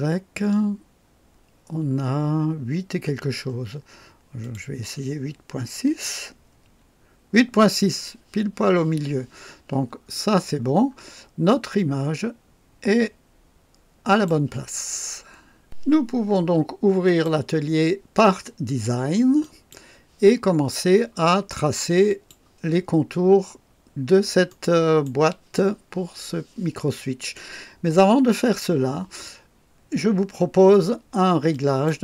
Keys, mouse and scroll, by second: 0.5-1.0 scroll up 3, 4.4 click, 5.9 BackSpace, 6.6 KP_6, 10.0-10.9 scroll down 2, 11.5-14.4 drag, 17.0 click, 19.4 click, 20.4-20.7 scroll down 2, 22.0 click, 22.8-23.2 scroll up 2, 23.8-24.2 scroll down 3, 24.4-25.2 right drag, 31.5 click.